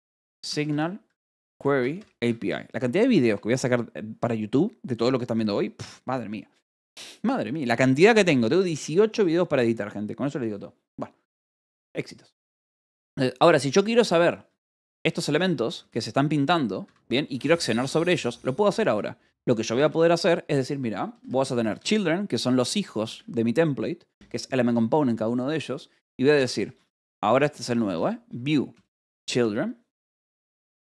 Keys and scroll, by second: 0.0-3.0 typing, 14.5 k, 16.3 shift+v, 16.7 Escape, 17.7-23.0 typing, 26.5-30.8 typing.